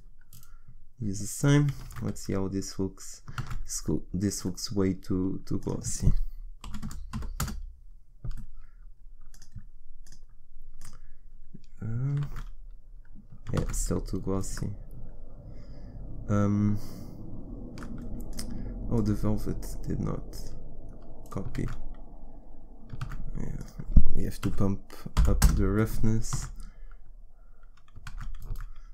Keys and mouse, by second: 1.9 shift+z, 3.4 shift+z, 12.2 shift+z, 13.6 shift+z, 23.0 shift+z, 23.1 shift+z, 28.0 shift+z, 28.1 shift+z.